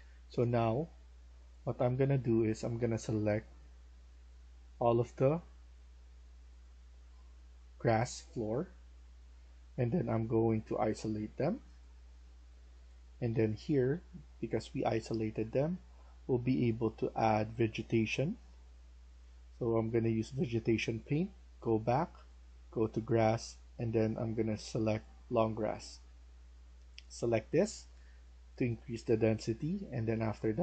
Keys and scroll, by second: 0.0-0.3 typing, 12.1-13.7 typing.